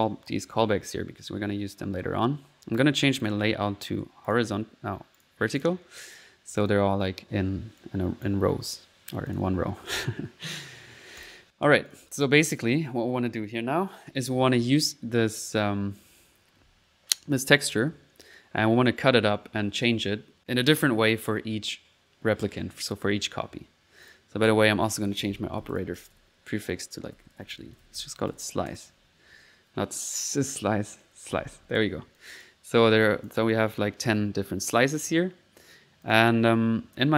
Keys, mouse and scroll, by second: 0.0 click, 1.2 middle click, 3.2 click, 4.3 click, 4.7 typing, 5.2 click, 5.6 click, 6.2 middle click, 6.5 click, 7.2 click, 7.8 right click, 7.9 click, 8.1 right click, 8.7 middle click, 9.3 click, 9.9 middle click, 10.8 typing, 11.2 click, 11.9 click, 14.5 click, 23.6 typing, 24.0 click, 24.7 click, 30.2 click, 32.2 click, 32.8 middle click, 33.0 click, 34.1 right click, 34.9 click, 36.0 click.